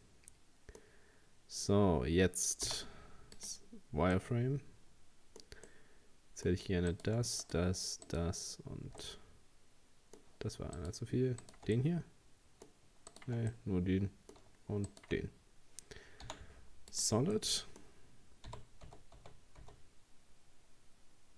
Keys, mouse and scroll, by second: 2.7 z, 4.2-6.9 middle drag, 6.9 right click, 7.4 shift+right click, 8.1 shift+right click, 9.0-10.8 middle drag, 10.8 shift+right click, 11.4 shift+right click, 11.8-13.1 middle drag, 13.1 shift+right click, 13.5-14.9 middle drag, 14.9 shift+right click, 16.3 z, 17.4-18.5 middle drag, 18.5 g.